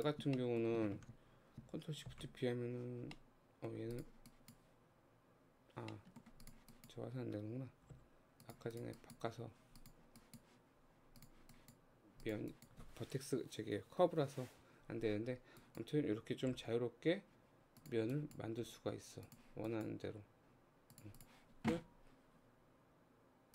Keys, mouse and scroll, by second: 0.4-2.1 shift+middle drag, 2.1 ctrl+shift+b, 3.2 middle click, 3.9 click, 4.3-5.9 drag, 5.9 middle click, 6.5 click, 6.7-8.0 drag, 8.0 g, 8.8 click, 9.0 click, 9.8 click, 11.2 click, 12.3 click, 12.6-15.6 drag, 16.6 g, 18.1 click, 18.7 g, 19.7 click, 20.1 g, 21.2 click.